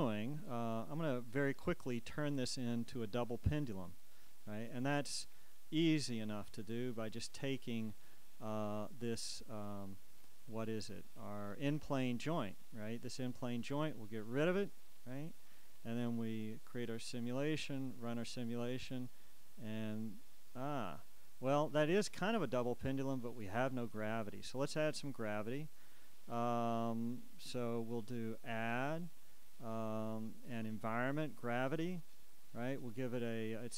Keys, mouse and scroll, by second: 5.9-10.0 drag, 11.6-18.7 drag, 28.6 click, 31.8 click.